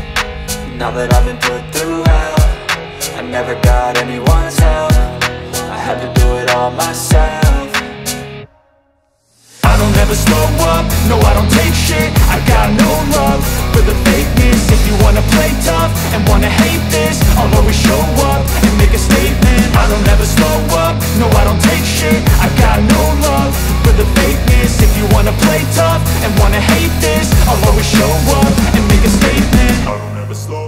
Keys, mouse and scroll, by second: 0.8 ctrl+j, 3.0 click, 5.2 ctrl+j, 8.5 click, 13.0 click, 15.6 click, 21.7 click, 29.7-30.6 drag.